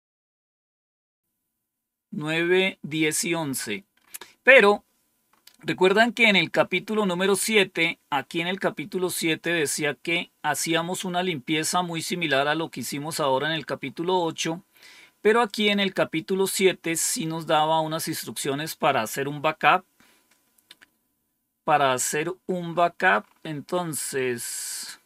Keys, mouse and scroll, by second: 1.2 scroll down 1, 5.8-6.5 scroll up 2, 6.5-11.8 scroll up 1, 11.8 scroll down 2, 12.4 scroll down 2, 13.2 scroll up 2, 15.4 click, 17.2 scroll down 2, 18.1-19.0 scroll down 1, 20.3-21.7 scroll down 1, 21.8-22.6 scroll down 1, 22.6-24.8 scroll up 2, 24.8-25.0 scroll up 1.